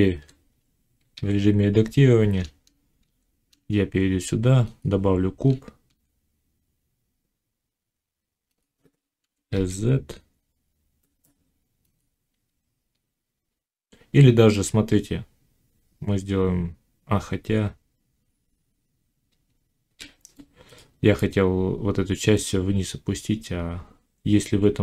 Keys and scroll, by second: 1.0 a, 2.9 shift+a, 5.8 s, 9.2 s, 19.3 z.